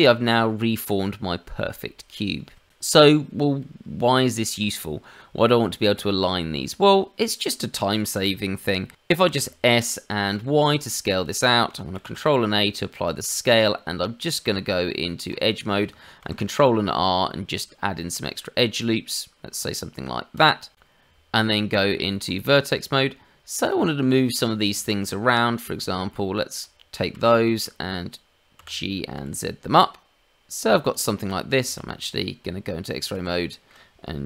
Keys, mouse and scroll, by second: 3.8 Tab, 5.1-5.4 scroll up 2, 5.4 middle click, 5.9 shift+middle click, 7.1-8.0 scroll down 3, 8.1 s, 8.9 Escape, 9.2 s, 11.9 ctrl+a, 13.4 Tab, 16.2 ctrl+r, 21.0 Tab, 23.6 click, 24.1 shift+middle click, 24.7 shift+z, 25.2 click, 27.1 shift+z, 27.3 shift+middle click, 28.5 g, 31.6 shift+z, 31.9 click, 33.1 shift+z, 33.3 shift+middle click.